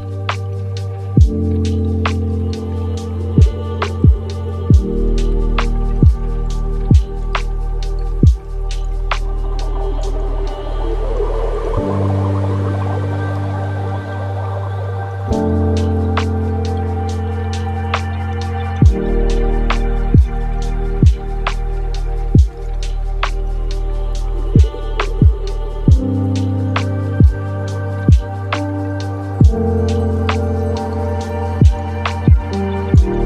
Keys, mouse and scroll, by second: 1.9 middle click, 2.6 click, 3.5-4.6 middle drag, 4.6 drag, 7.7-10.8 middle drag, 13.1 click, 14.7 click, 15.6 click, 16.8-18.6 middle drag, 18.6 click, 20.2 drag, 21.9-24.6 middle drag, 24.6 click, 25.3-26.0 middle drag, 26.0 space, 26.8-27.2 scroll down 2, 27.2-30.2 middle drag.